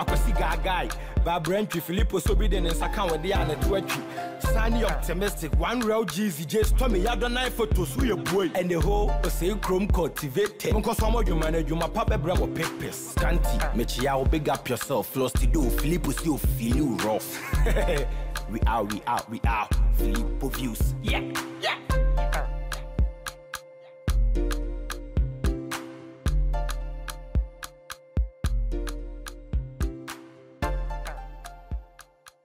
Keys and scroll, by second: 29.3 ctrl+-.